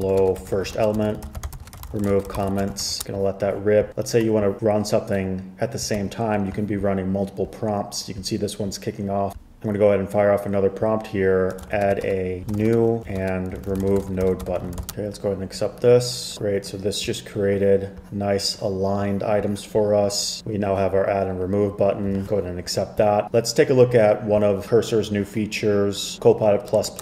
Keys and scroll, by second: 0.0-3.5 typing, 6.1 super+k, 11.4-15.4 typing.